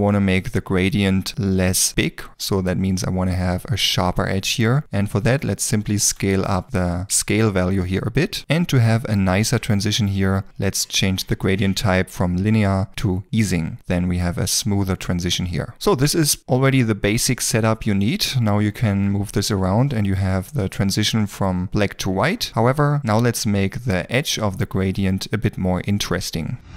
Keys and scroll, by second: 0.0 z, 6.0 KP_1, 6.4 Return, 19.6 g.